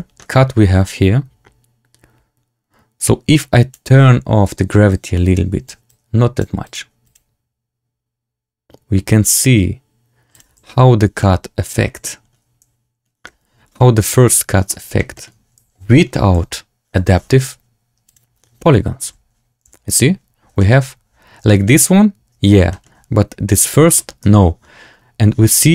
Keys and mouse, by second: 0.8-3.6 drag, 0.8 space, 4.9 click, 5.8 click, 7.0 click, 10.6 z, 11.1 drag, 11.3-11.9 middle drag, 13.2 middle drag, 13.4 click, 13.5 middle click, 13.6 click, 14.6 drag, 15.0 shift+drag, 16.2 z, 19.0 z, 19.6 z, 19.8 Tab, 20.5 shift+click, 22.6 shift+click, 23.9 shift+click, 24.2 Tab.